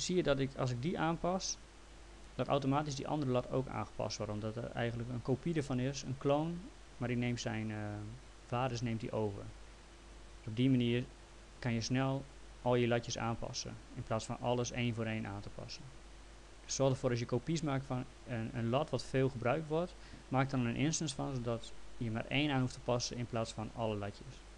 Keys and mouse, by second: 4.1 click, 16.0 click, 23.5 click.